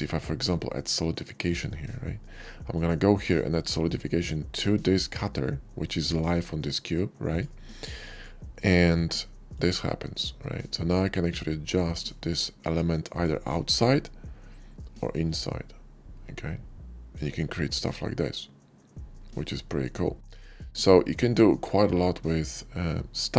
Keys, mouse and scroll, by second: 2.7 click, 5.9 click, 7.1 click, 7.9 click, 9.3 click, 11.0-17.1 drag, 17.3-21.0 shift+middle drag, 21.3 shift+middle click, 22.2-23.3 shift+drag.